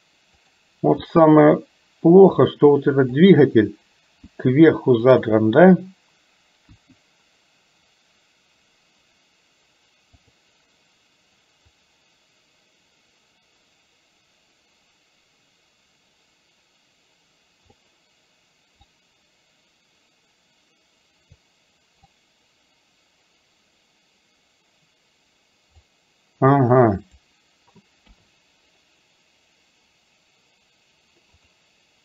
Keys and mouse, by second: 1.0 g, 4.4 r, 6.8 KP_1, 10.2 click, 12.1-17.9 drag, 19.0 click, 19.6-21.5 drag, 22.2-25.9 drag, 27.1 click, 28.1 KP_3.